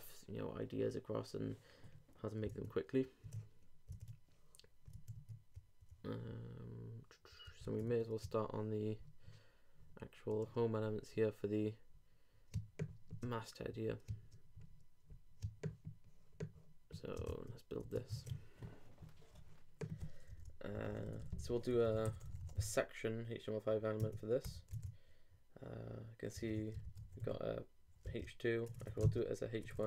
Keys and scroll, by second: 7.6 super+Tab, 18.1 shift+super+Tab, 24.7 super+Return, 24.8 super+Tab, 26.4 super+Tab, 26.8 shift+super+,, 27.0 shift+h, 28.0 shift+2, 28.7 shift+BackSpace, 29.0 shift+., 29.6 shift+BackSpace.